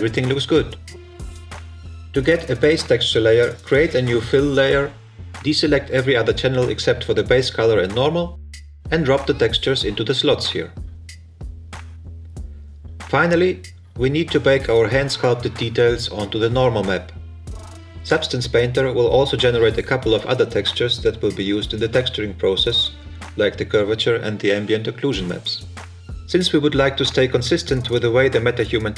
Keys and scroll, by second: 0.1 Delete.